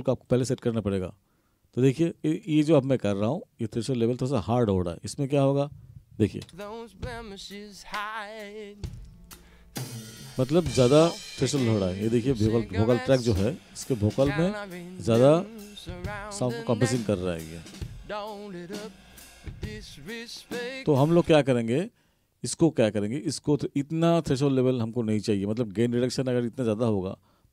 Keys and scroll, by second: 6.5 space, 21.2 space.